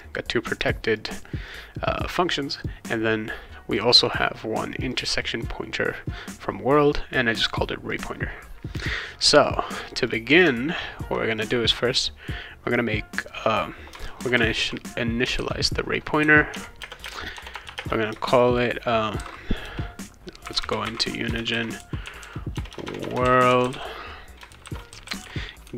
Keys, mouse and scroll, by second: 0.0 click, 0.6 click, 0.9 click, 1.5 click, 1.9 click, 2.5 click, 3.7 click, 4.0 click, 4.7 click, 7.4 click, 7.8 click, 9.4 click, 10.1 click, 11.4 click, 13.9-15.4 typing, 16.5 Tab, 16.8-17.8 typing, 19.1-25.7 typing.